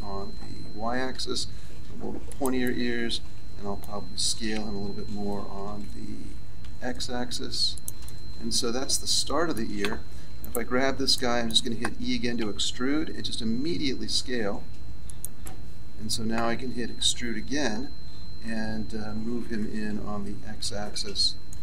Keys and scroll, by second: 6.1 s, 12.3 e, 16.9 e.